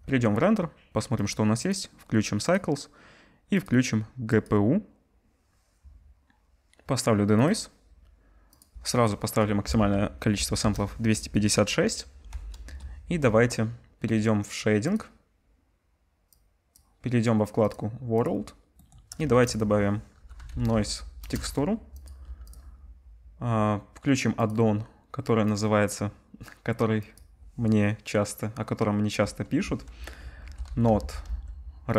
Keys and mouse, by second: 1.2 middle click, 1.2 right click, 7.4-12.0 drag, 8.6-12.0 middle drag, 8.6-12.0 right drag, 12.6 KP_0, 15.1-16.3 drag, 15.1 KP_0, 19.2 shift+a, 22.0 click, 22.5-24.4 drag.